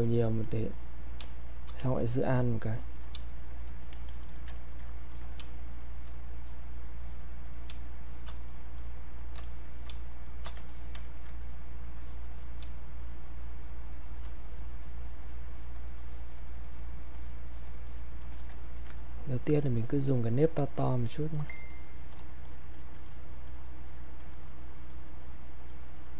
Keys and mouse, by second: 1.2 space, 1.5 click, 3.2 space, 3.5 click, 4.1 alt+click, 4.5 ctrl+right click, 5.1 click, 5.4 space, 5.8 click, 5.9 space, 6.4 click, 7.7 space, 8.0 click, 8.2 space, 8.5 click, 9.9 space, 10.3 click, 10.7 alt+click, 11.0 ctrl+right click, 11.4 click, 12.7 space, 13.0 click, 13.2 space, 14.0 click, 15.2 alt+click, 17.1 alt+click, 17.8 click, 18.3 alt+click, 18.6 ctrl+right click, 19.4 alt+click, 21.5 alt+shift+click, 21.7 shift+click, 23.2 click, 25.7 alt+click.